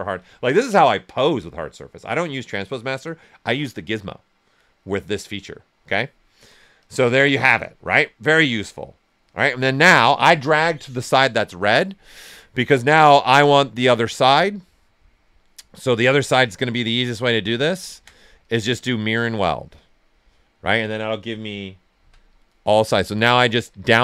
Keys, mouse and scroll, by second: 6.7 click, 7.4 q, 7.9 ctrl+right click, 8.9-12.0 right drag, 9.5 typing, 12.0-15.8 drag, 15.8 shift+click, 16.4-17.9 drag, 18.4-19.7 drag, 19.7 click, 21.9 Down, 23.0 click, 23.8 Down.